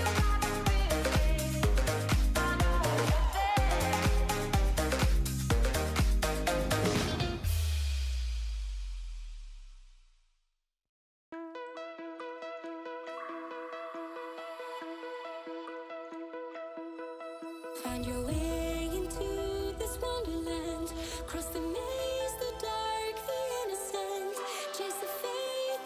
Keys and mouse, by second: 0.9 middle click, 1.6 click, 2.4-3.1 drag, 3.8 ctrl+shift+click, 4.2 middle click, 4.6 middle click, 4.7-5.1 shift+drag, 5.5 shift+click, 6.5 shift+click, 7.8 drag, 7.8 right drag, 8.4 shift+click, 9.6 ctrl+shift+click, 12.6 click, 15.7 ctrl+v, 15.8 click, 18.3 ctrl+s, 18.8 middle click, 20.3 click, 21.3 middle drag, 21.7 shift+click, 22.4 middle click, 23.1 middle click, 23.8 click, 24.1 middle click.